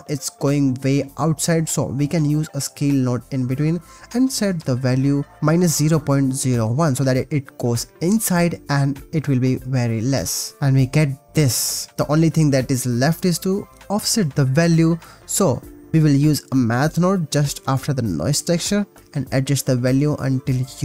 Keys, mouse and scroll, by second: 1.8-2.9 shift+drag, 3.5 shift+middle click, 3.8 middle click, 4.3 middle click, 6.0 shift+middle click, 6.3-8.7 drag, 8.7 click, 9.7-11.9 typing, 12.4 click, 14.7 click, 15.1 click, 16.6 click, 17.6-19.2 shift+drag, 19.6-20.8 shift+drag.